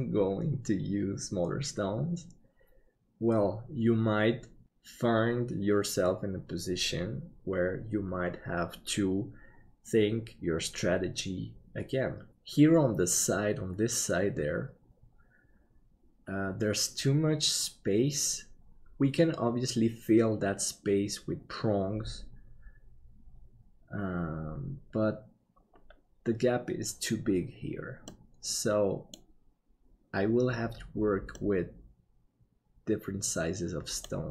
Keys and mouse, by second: 28.2 middle click, 31.5-34.0 middle drag.